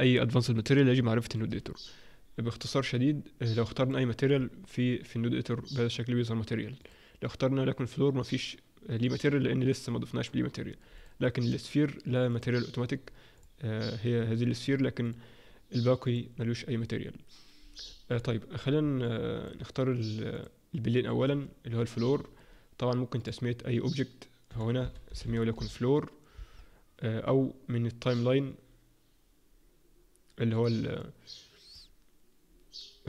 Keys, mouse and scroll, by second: 3.9 click, 11.4 click, 13.3 click, 15.0 click, 16.0 click, 18.1-18.8 scroll down 2, 18.8 scroll down 1, 19.0 alt+middle click, 20.4 click, 21.2-21.9 scroll up 1, 21.9-33.0 scroll up 1.